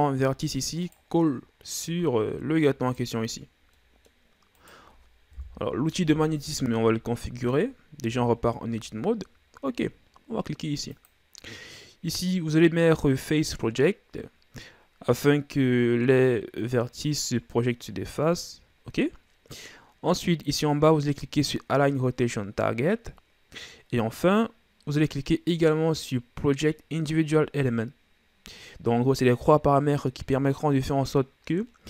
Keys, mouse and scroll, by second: 1.1-2.2 middle drag, 2.2 Tab, 2.8 right click, 3.5 scroll down 2, 3.7-4.5 middle drag, 4.5 right click, 5.3 KP_1, 7.0-8.0 shift+scroll up 2, 8.0 Tab, 10.9-20.5 drag.